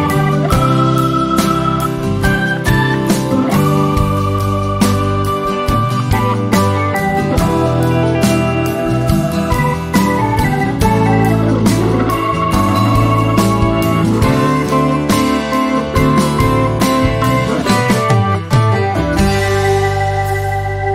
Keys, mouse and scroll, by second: 0.4 typing, 1.1 Return, 2.4 click, 3.1 ctrl+a, 3.5-6.4 typing, 4.2 shift+Tab, 6.9 shift+Tab, 7.6-8.5 typing, 8.7 Return, 9.7 click, 10.0 ctrl+z, 12.3-13.2 drag, 15.2 ctrl+a, 15.2-16.2 typing, 17.4 click, 18.2 ctrl+a, 18.2-19.2 typing, 20.8-20.9 typing.